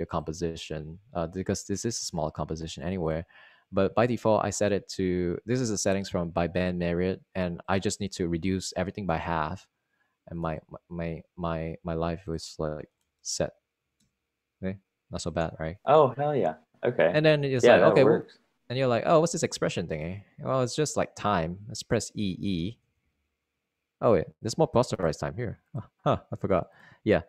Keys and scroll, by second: 0.4 space, 1.1 space, 2.4 space, 9.9 1, 10.1 Tab, 10.3 2, 11.3 0, 11.5 Return, 13.7-15.2 typing, 23.8 typing.